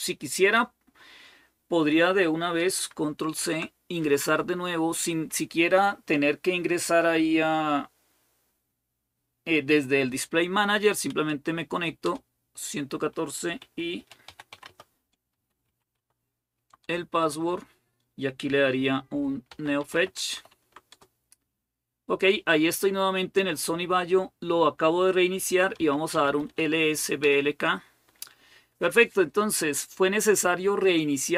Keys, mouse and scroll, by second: 3.1 ctrl+c, 3.8 Up, 4.0 Up, 11.8 Return, 13.1-16.3 typing, 16.6 Return, 19.0-20.6 typing, 20.7 Return, 25.1-26.8 typing, 27.0 Return, 28.9 typing.